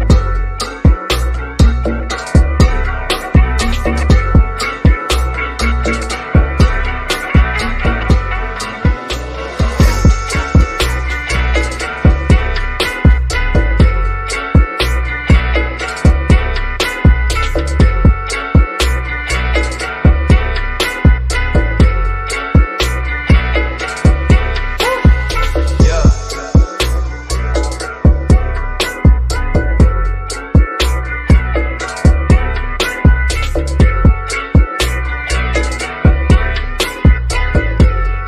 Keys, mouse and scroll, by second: 1.4 0, 2.2 BackSpace, 2.6 1, 4.3 click, 11.8 click, 14.3 click, 18.6 click, 19.5 1, 21.8 click, 24.0 click, 25.0 5, 25.5 click, 27.6 click, 32.5 click, 34.8 typing, 35.7 click, 37.5 5, 38.0 click.